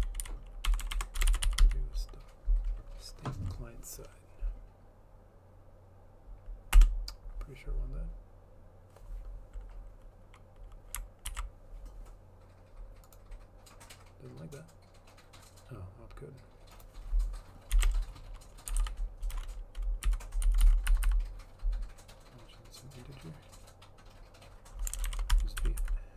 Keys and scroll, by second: 0.0-2.5 typing, 6.9 Return, 11.5 ctrl+s, 18.6-19.5 typing, 20.2 Delete, 20.6 Down, 20.8 Down, 21.0 Left, 21.2 Left, 25.0-26.1 typing, 25.8 End, 25.9 Left.